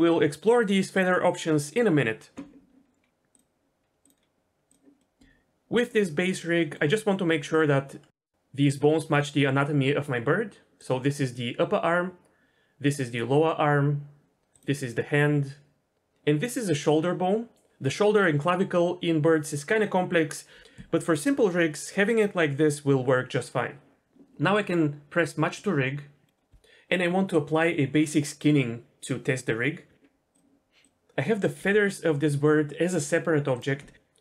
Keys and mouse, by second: 3.3-4.7 drag, 5.0 middle click, 6.3 middle click, 7.4 middle click, 8.2 middle click, 12.9 click, 16.9 middle click, 26.2 middle click, 30.3 click, 30.8 click, 31.5 g, 33.5 click.